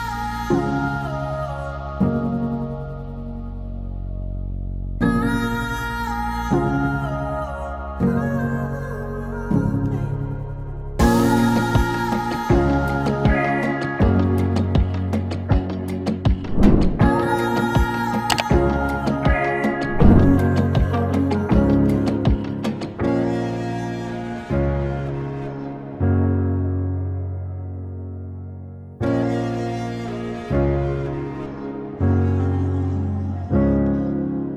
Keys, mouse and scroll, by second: 2.2 ctrl+shift+c, 4.8-8.0 typing, 9.3-10.0 typing, 12.2-16.4 drag, 16.4 alt+], 17.4 click, 19.1-21.0 drag, 21.0 ctrl+d, 23.8-28.0 drag, 28.0-34.5 drag.